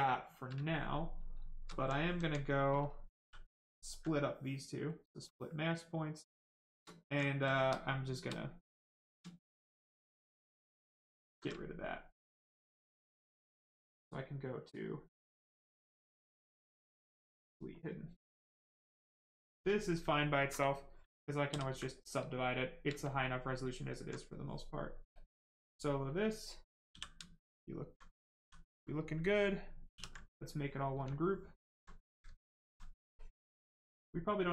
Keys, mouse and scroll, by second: 1.2 right click, 1.7 alt+right click, 2.1 alt+right click, 2.6 right click, 3.2 w, 4.8 click, 5.8 right click, 6.5 shift+right click, 6.9 alt+right click, 7.4 ctrl+right click, 11.4 shift+right click, 11.4 right click, 12.7 click, 17.3 click, 18.8 right click, 20.1 alt+right click, 20.6 ctrl+right click, 21.4 ctrl+d, 21.9 right click, 22.4 shift+right click, 23.6 alt+click, 24.2 right click, 24.2 right click, 26.8 f, 27.2 alt+right click, 28.3 right click, 29.9 ctrl+w, 30.3 right click, 31.2 alt+right click, 33.1 click, 33.2 click, 34.0 right click.